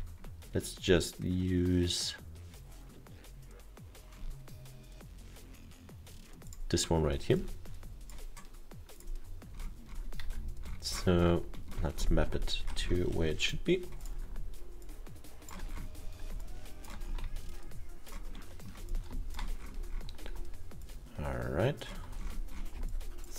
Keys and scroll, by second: 10.3 F1.